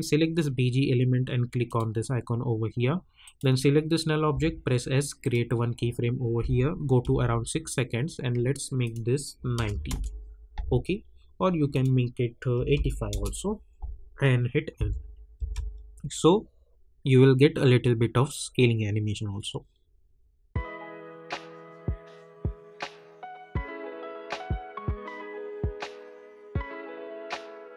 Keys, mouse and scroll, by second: 4.3 s, 5.2 click, 7.0 k, 8.8 click, 9.8 Return, 13.1 Return, 14.7 n, 15.3 space.